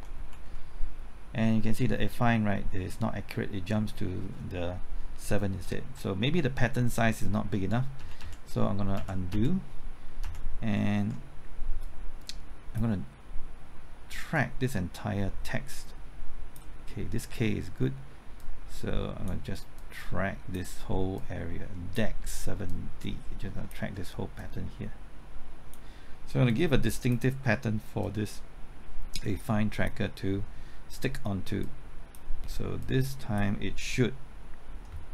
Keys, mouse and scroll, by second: 0.2 alt+Right, 0.5 alt+Right, 5.6 typing, 7.6 ctrl+z, 8.0 ctrl+z, 8.2 ctrl+z, 8.9 ctrl+z, 9.3 ctrl+z, 10.2 ctrl+z, 11.8 click, 13.4-17.4 drag, 17.4-19.4 drag, 19.4 click, 21.2-22.4 drag, 22.4-30.4 drag.